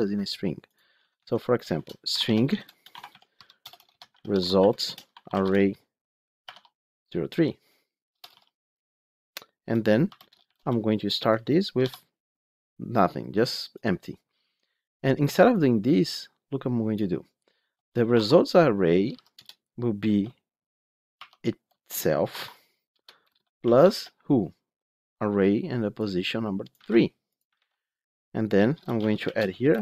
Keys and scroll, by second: 0.9 Tab, 19.3 Return, 26.6 ctrl+c, 27.5 ctrl+v.